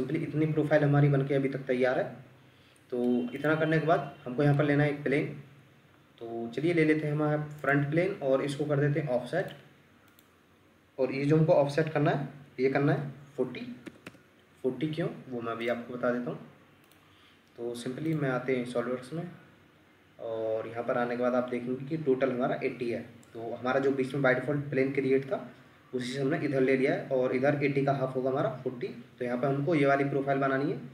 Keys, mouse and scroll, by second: 3.6 Escape, 13.5-14.1 typing, 14.1 Return.